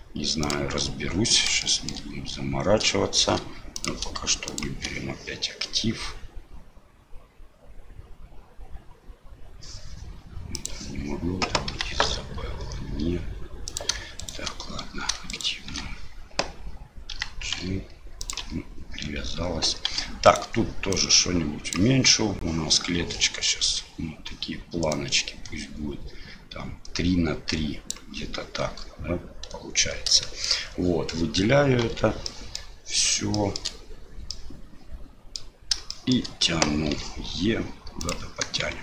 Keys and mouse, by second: 1.8 shift+click, 3.9-5.3 drag, 10.6 click, 14.2 shift+right click, 15.3 shift+right click, 17.1 g, 19.9 2, 20.3 right click, 20.9 click, 24.9-27.9 drag, 30.2 shift+middle click, 31.8 l, 32.2 middle click, 33.5 shift+click, 34.4 click, 35.9 shift+click, 38.7 Tab.